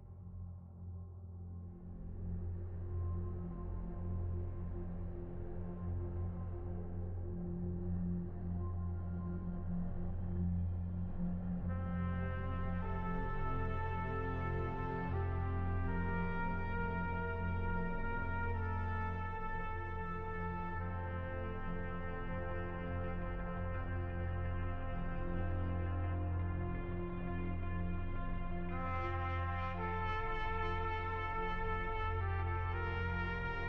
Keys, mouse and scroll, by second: 0.7 shift+c, 1.3 f, 2.7-5.6 ctrl+drag, 6.6 p, 8.4-11.2 drag, 11.2-14.1 middle drag, 14.1-15.7 drag, 15.7-17.4 middle drag, 17.4 space, 17.7 middle click, 18.2 f, 19.5-22.6 drag, 24.1 middle click, 24.7 f, 26.0 shift+c, 27.1-30.4 drag, 30.6-32.5 middle drag, 32.5 f, 33.4 f.